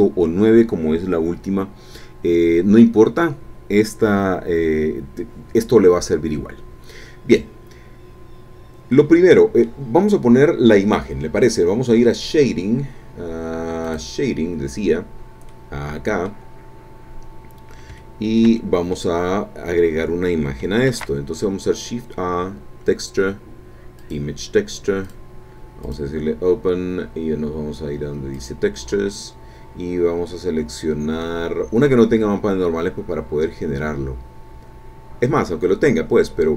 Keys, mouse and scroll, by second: 8.9 click, 13.8 click, 15.5-16.5 drag, 16.5 middle click, 17.0 scroll down 1, 17.2 middle click, 18.0-19.2 shift+middle drag, 19.5-20.6 scroll up 1, 20.6-21.2 shift+scroll up 1, 20.9 shift+a, 24.0 click, 25.0 click, 25.8 click, 28.3 click, 29.8-30.6 scroll down 2, 30.8-31.2 scroll down 2, 31.5-32.8 scroll down 4, 33.2 scroll down 2, 34.1-34.5 scroll down 2, 35.3-36.4 scroll down 4.